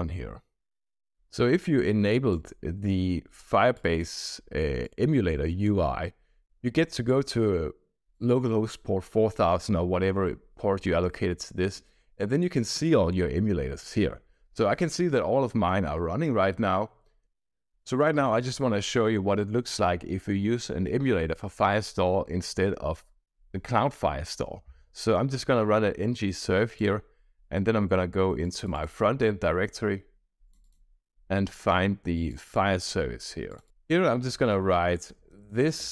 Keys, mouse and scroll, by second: 1.3-2.4 drag, 3.7-5.6 drag, 7.0-8.2 drag, 12.0-13.4 scroll down 4, 14.2 scroll up 1, 16.2-17.2 scroll down 2, 28.4 click, 28.9 drag, 30.4 click, 30.6 click, 32.2 click, 33.4 click, 34.9-35.9 typing.